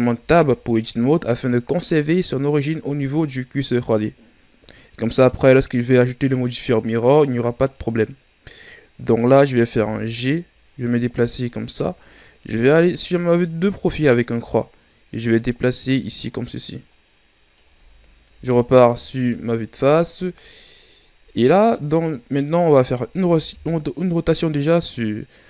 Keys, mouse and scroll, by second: 0.1 Tab, 1.4-2.1 shift+scroll up 2, 2.1-3.7 scroll up 1, 9.6 g, 12.4 KP_3, 13.6-14.1 shift+scroll down 4, 14.1-15.2 scroll up 3, 15.2-18.3 drag, 18.3 KP_1, 19.4-20.6 ctrl+scroll up 7, 20.6-21.4 ctrl+scroll up 3, 21.4 shift+scroll down 2, 22.2-23.2 scroll up 1, 23.2 r.